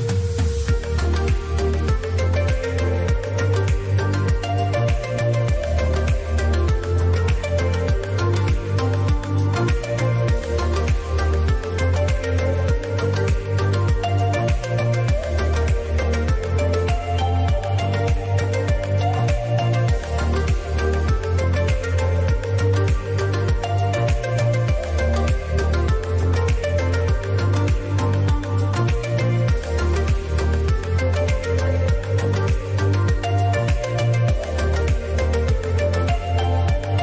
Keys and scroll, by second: 6.7 ctrl+a, 6.9 ctrl+BackSpace, 7.6 Caps_Lock, 7.8-9.9 typing, 12.5 ctrl+a, 12.6 ctrl+BackSpace, 13.1-16.4 typing, 18.1 ctrl+a, 18.4-23.2 typing, 22.4 Left, 22.6 Left, 22.7 Left, 22.8 Left, 23.0 Right, 26.7 ctrl+a, 27.1-28.3 typing, 30.6 ctrl+a, 31.0-32.7 typing, 34.0-36.3 typing.